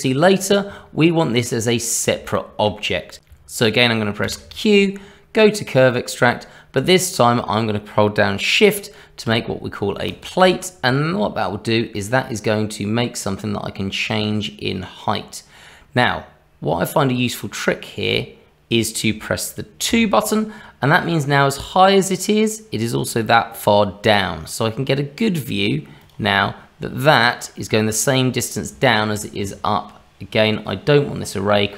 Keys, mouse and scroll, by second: 0.8-1.2 scroll up 2, 2.2 shift+middle click, 3.2 ctrl+z, 4.2 q, 26.3 middle click, 28.8 shift+middle click.